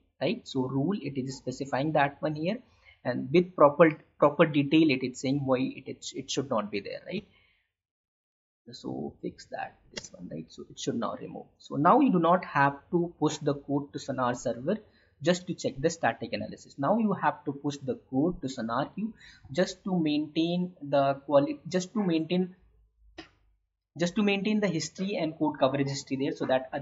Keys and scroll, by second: 9.9 space.